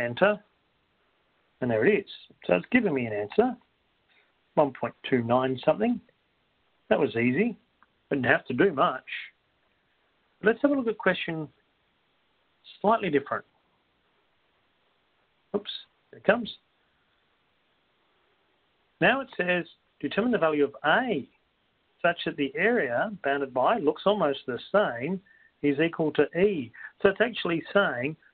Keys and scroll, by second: 0.6 Return.